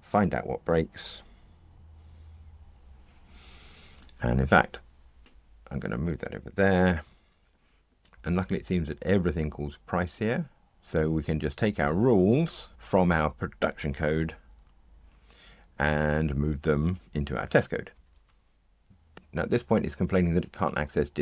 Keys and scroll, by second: 1.7 ctrl+r, 6.7 shift+super+F12, 14.4 super+x, 18.1 super+v.